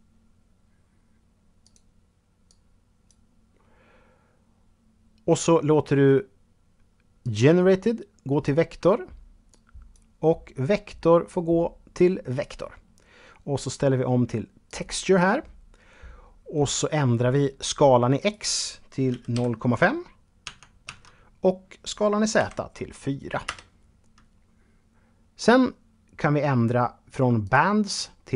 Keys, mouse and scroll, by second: 0.8 click, 6.4 click, 13.9 click, 17.3 click, 18.3 KP_Decimal, 18.5 KP_5, 19.6 Tab, 20.0 Tab, 21.5 KP_4, 22.6 Return, 26.6 click, 27.9 click.